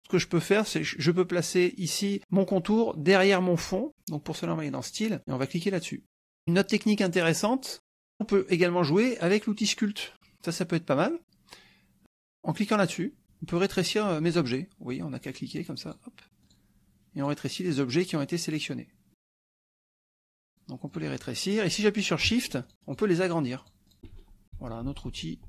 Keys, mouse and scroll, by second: 4.8 click, 5.7 click, 6.0-7.2 drag, 9.6 click, 13.4 click, 14.8 click, 15.4 click, 15.8 click, 16.4 click, 17.1 click, 17.6 click, 18.4 click, 19.4 KP_Subtract, 20.4 click, 20.8 click, 22.6 shift+click, 22.8 shift+click, 23.2 shift+click, 24.1 ctrl+shift+z.